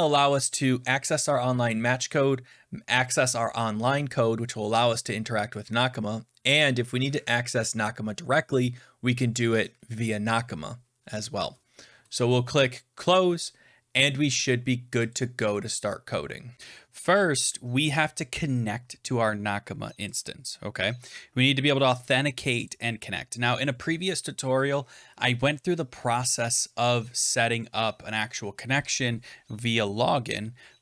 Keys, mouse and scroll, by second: 13.0 click, 15.0 click, 20.1 click, 22.6 click, 24.9 scroll down 8, 25.2-27.6 scroll.